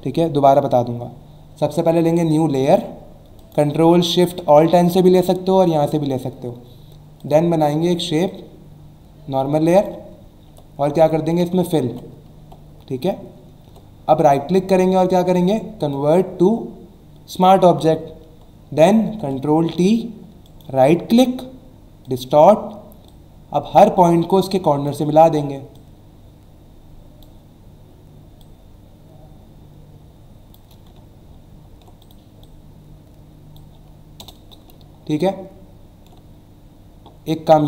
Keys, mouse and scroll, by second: 3.4 click, 7.2 click, 8.3 click, 11.3 alt+BackSpace, 11.8 ctrl+d, 12.4 v, 14.2 right click, 15.8 click, 20.5 right click, 22.0 click, 23.1 click, 25.7 click, 28.4 click, 31.0 alt+scroll up 1, 32.0 click, 32.4 click, 34.2 Return, 34.8 alt+scroll down 1, 35.9 alt+scroll down 1.